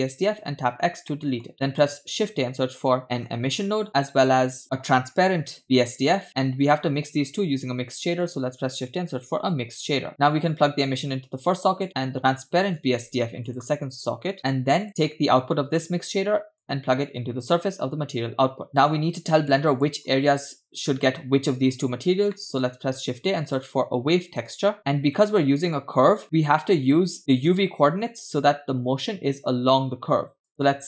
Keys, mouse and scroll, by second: 0.6 x, 1.1 middle click, 1.5 shift+a, 7.4 shift+a, 10.9 click, 12.3 click, 12.8 shift+x, 12.9 shift+a, 14.9 click, 16.6-17.8 drag, 18.7 click, 19.5 click, 22.4 middle click, 22.8 shift+a, 25.8-26.3 drag, 26.4 middle click, 30.5 click.